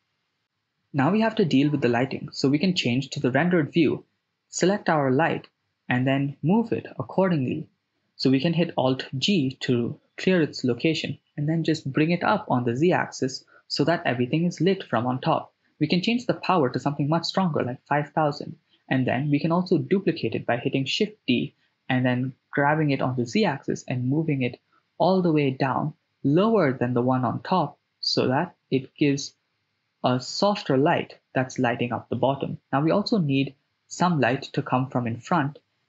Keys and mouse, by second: 0.2 click, 3.3 click, 3.3 right click, 4.2-4.9 drag, 4.2 right click, 5.3 g, 8.3 click, 9.1 alt+g, 10.0 g, 10.2 z, 12.7 click, 13.9 click, 14.7-16.8 drag, 16.2 0, 16.3 0, 18.5 shift+g, 20.3 shift+d, 22.0 z, 27.7 click, 32.4 shift+d, 33.0 z.